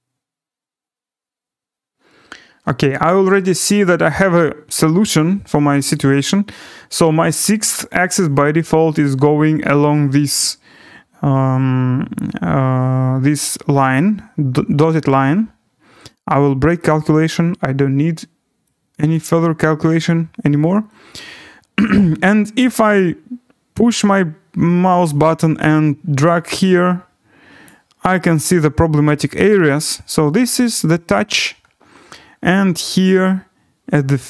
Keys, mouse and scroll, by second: 16.8 click, 17.8-18.2 scroll, 19.2 click, 19.5-21.3 scroll, 25.0 click, 25.2-26.4 scroll, 27.6 click, 28.7 scroll, 29.8 right click, 31.1-32.8 scroll.